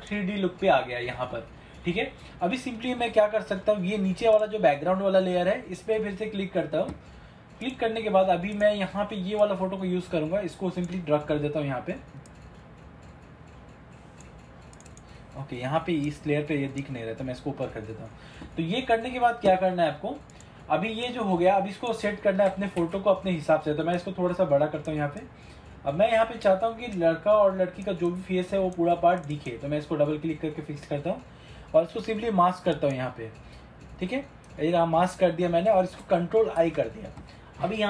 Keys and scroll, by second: 22.9 ctrl+t, 36.7 ctrl+i.